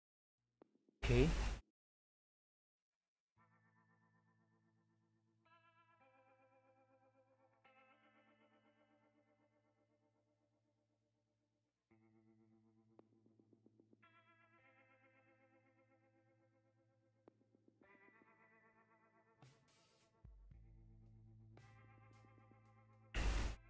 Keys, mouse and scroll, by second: 1.9 right click, 18.1 scroll up 1.